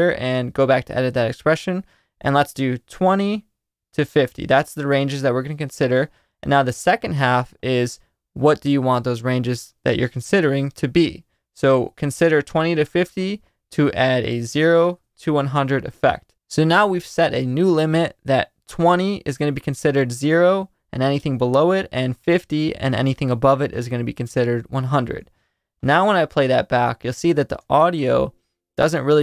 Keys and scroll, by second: 2.5-3.5 typing, 5.1-6.2 typing, 14.5 BackSpace, 14.8 0, 27.5 space.